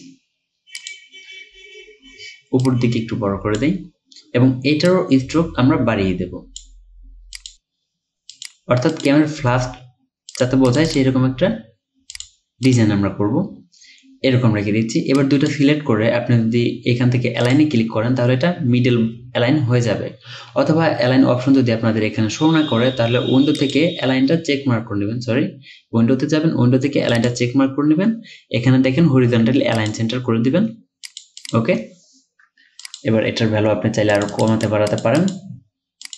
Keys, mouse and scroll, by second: 10.7 double click, 31.4 double click.